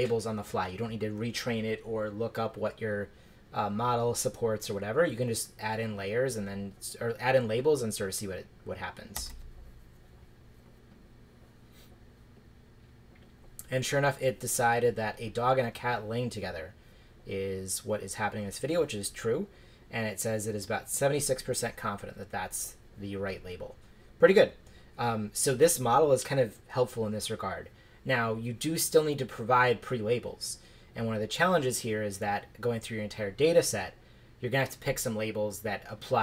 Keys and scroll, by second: 9.2 shift+Return.